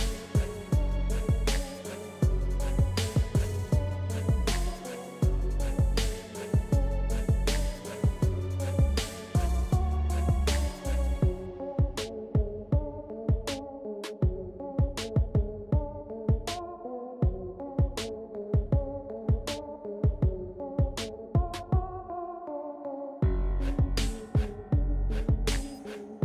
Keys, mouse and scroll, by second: 1.3 ctrl+scroll down 1, 4.4 space, 4.9 click, 5.0 space, 7.3 scroll down 1, 7.4 space, 8.6-15.1 drag, 15.2 space, 15.6 click, 15.7 space, 16.9 ctrl+z, 20.3-26.2 drag, 20.4 typing.